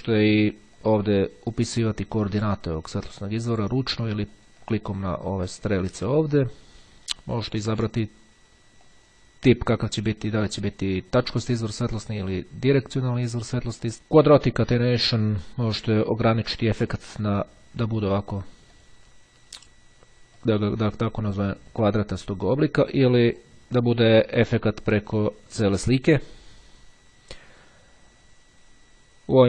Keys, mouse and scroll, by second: 0.9 click, 2.7 click, 4.2-6.3 drag, 8.3-9.6 drag, 12.1 click, 13.2 click, 14.1-15.7 drag, 18.7 click, 20.3 click, 23.2 click.